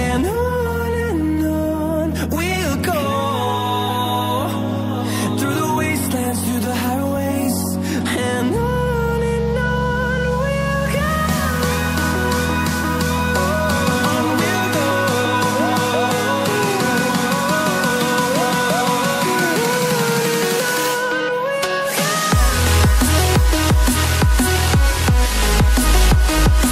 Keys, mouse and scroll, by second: 0.6 click, 0.8 double click, 2.3 click, 3.9 scroll down 1, 4.5 scroll up 1, 5.5 click, 5.6 double click, 7.0 click, 8.4 ctrl+z, 9.2 click, 9.3 double click, 9.7 click, 9.8 double click, 11.3 click, 13.6 scroll down 1, 14.8 click, 15.3 scroll down 1, 16.5 click, 19.2 double click, 19.6 click, 19.8 double click, 20.3 click, 22.9 double click, 24.0 click, 26.1-26.5 scroll up 1.